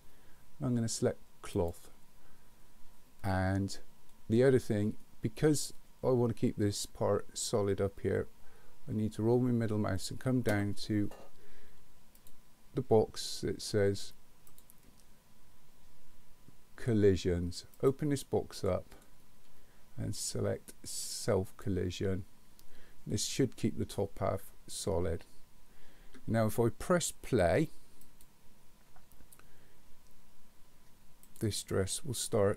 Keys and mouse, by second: 1.6 click, 12.2 click, 14.6 click, 17.7 click, 21.6 click, 28.1 click, 31.3 click.